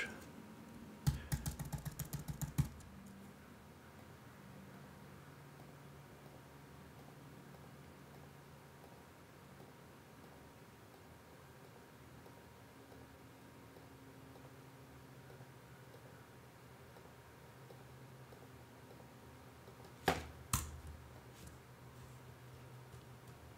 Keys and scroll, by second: 1.0 super+d, 20.5 BackSpace.